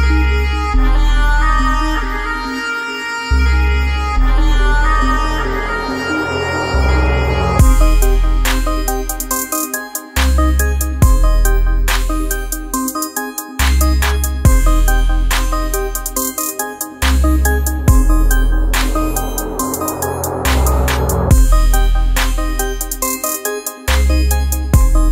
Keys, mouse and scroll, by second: 0.0 click, 2.3 typing, 2.8 click, 6.8 click, 10.8-25.1 drag, 20.9 typing.